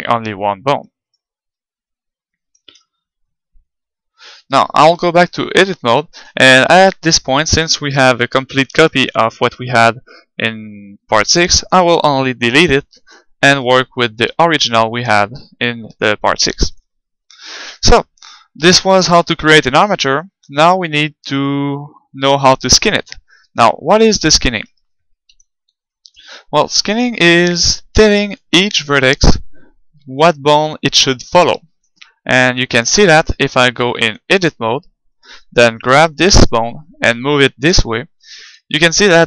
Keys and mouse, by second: 1.1-2.9 right drag, 2.5 ctrl+Tab, 5.0 KP_1, 5.8-8.9 middle drag, 7.9 g, 8.9-13.2 right drag, 12.5 Delete, 13.5-15.3 right drag, 14.4-18.4 middle drag, 18.9-22.1 middle drag, 25.3 z, 25.9-27.9 middle drag, 30.0-34.5 middle drag, 33.9 ctrl+Tab, 35.1-36.4 right drag, 36.4-38.1 middle drag, 37.1 g, 38.5 click.